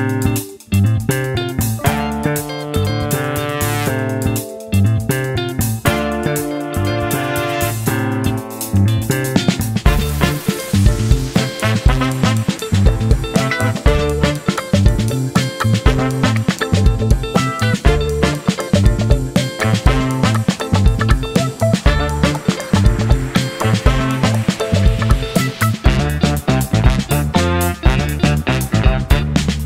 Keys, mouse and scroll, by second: 1.8 click, 3.9 click, 5.0 click, 6.3 click, 7.5 click, 8.7 click, 9.7 click, 10.8 click, 12.0 click, 13.3 click, 14.3 click, 15.0 click, 22.1 click, 25.0 click, 26.6-28.2 drag, 28.8 click.